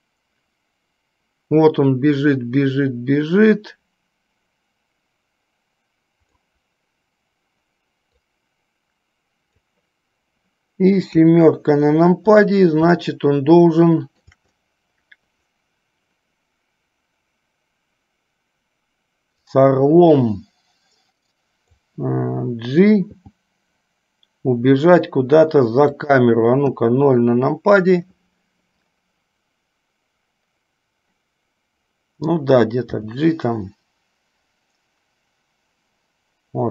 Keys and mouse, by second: 8.4 click, 11.3 KP_7, 13.1-14.5 shift+middle drag, 19.6-22.0 drag, 23.3 g, 26.9 KP_0, 33.0 g.